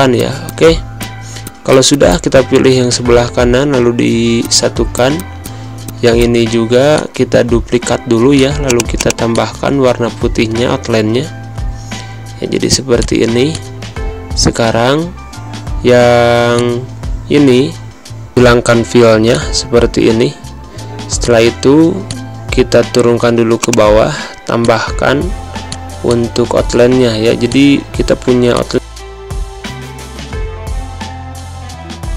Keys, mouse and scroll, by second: 0.1 click, 2.3 ctrl+z, 2.7 ctrl+c, 2.9 ctrl+f, 3.8 d, 4.3 click, 5.7 z, 5.8 click, 6.0 space, 6.1 click, 6.2 space, 6.8 click, 10.2 ctrl+], 12.8 click, 16.4 click, 17.2 ctrl+shift+], 18.7 ctrl+z, 19.2 shift+click, 19.9 ctrl+shift+], 21.0 click, 25.7 space, 25.9 click, 26.1 space, 27.3 click.